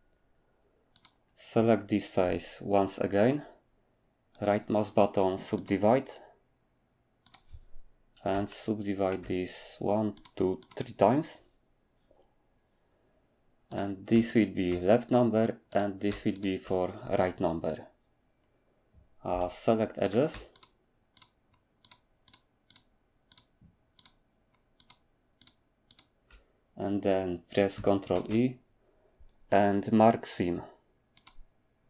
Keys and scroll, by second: 19.3 2, 28.1 ctrl+e.